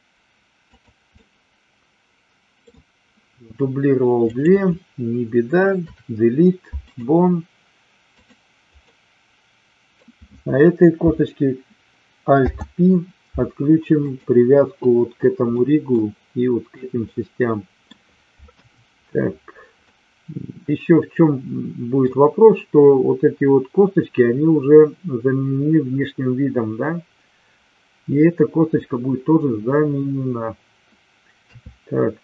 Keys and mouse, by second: 1.1-2.5 middle drag, 5.7 Delete, 8.1 click, 8.8-10.0 middle drag, 12.2 alt+p, 15.5 middle click, 17.0 middle click, 18.5 KP_1, 19.8-22.0 middle drag, 31.4 KP_3.